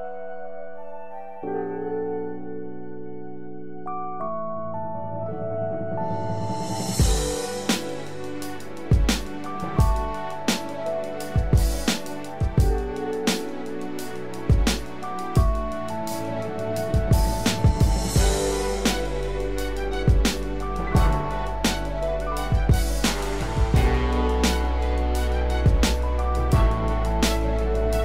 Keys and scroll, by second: 18.1 ctrl+z, 18.8 ctrl+=, 23.1 ctrl+z.